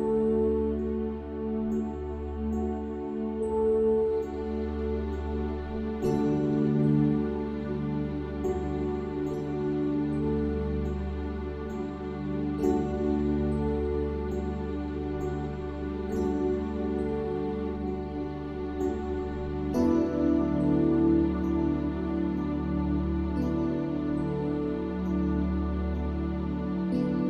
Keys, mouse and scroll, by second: 0.3 shift+d, 0.8 r, 1.8 middle click, 2.1 click, 3.1 middle click, 3.6 click, 4.4 click, 4.6 h, 6.4 click, 8.1 click, 8.9 Tab, 10.8 a, 11.6 x, 12.2-13.3 drag, 13.8 Tab, 14.9 click, 16.6-17.9 middle drag, 18.0 click, 18.5-22.8 typing, 18.9 click, 21.1 Tab, 23.4-24.4 drag, 24.7 click, 25.8 a, 26.0 a, 26.4 g.